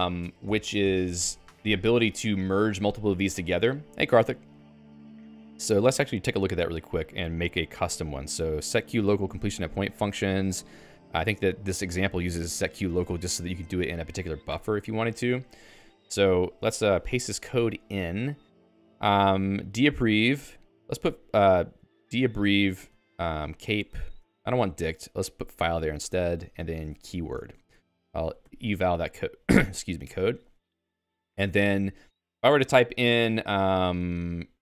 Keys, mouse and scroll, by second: 14.5 d, 15.6-27.6 typing, 16.7 Escape, 24.4 Escape, 28.4 ctrl+e, 30.0 Escape, 30.3 o, 30.5 Return, 34.4-34.6 typing.